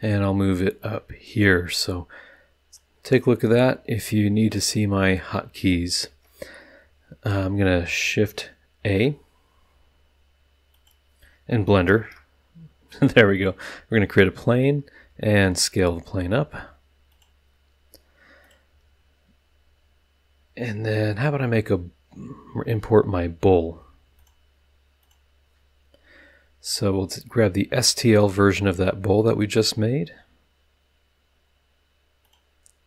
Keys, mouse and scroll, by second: 0.2-1.6 drag, 2.7-5.3 drag, 8.8 shift+a, 10.7 click, 11.9 shift+a, 13.3 click, 15.0 s, 17.1 click, 18.4 click, 24.2 click, 25.0 click, 26.6 click, 28.2 click, 32.2 click.